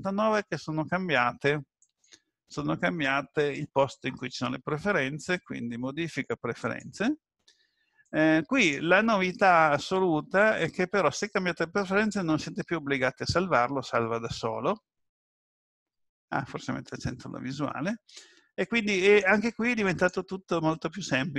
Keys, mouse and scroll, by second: 1.8 click.